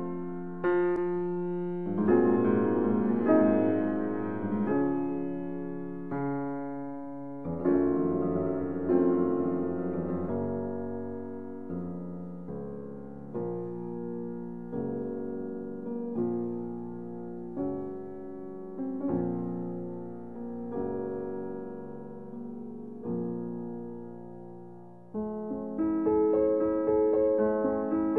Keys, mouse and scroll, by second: 1.4 click, 5.9 middle click, 6.6 click, 6.8 e, 7.4 z, 11.6 s, 15.5 click, 16.4-26.9 middle drag, 26.9 x.